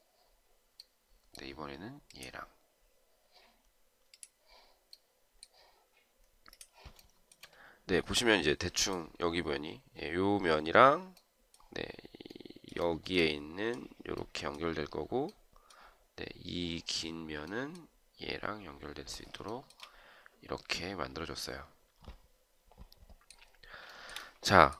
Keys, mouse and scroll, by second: 6.9 shift+right click, 12.7 shift+right click, 19.4 shift+right click, 23.7 shift+right click.